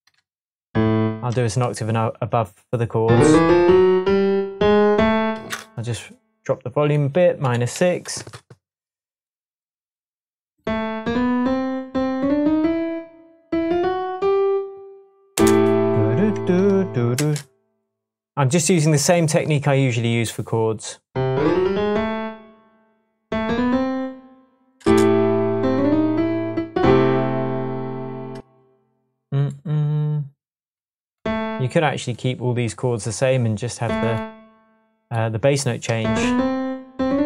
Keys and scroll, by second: 7.4 -, 7.7 6, 8.1 Return, 15.0 Left, 15.3 space, 17.1 space, 24.8 space, 25.5 space, 28.3 space.